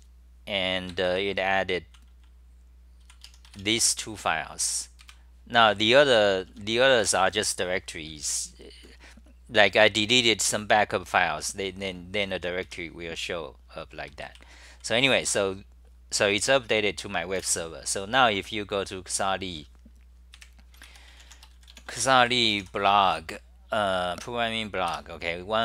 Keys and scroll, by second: 0.9 ctrl+g, 1.2-4.3 typing, 5.0 super+=, 5.9 ctrl+g, 6.1-7.2 typing, 12.7 2, 14.1 ctrl+g, 14.4-14.8 c, 15.0 c, 15.3 t, 17.4 super+w.